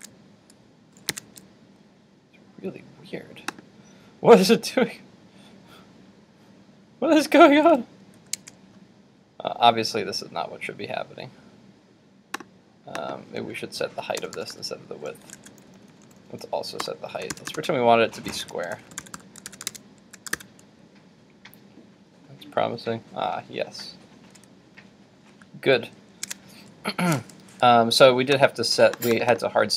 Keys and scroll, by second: 0.0 super+Tab, 8.4 super+Tab, 15.8 super+z, 19.5 super+s, 19.8 super+Tab, 20.3 super+r, 26.3 super+Tab.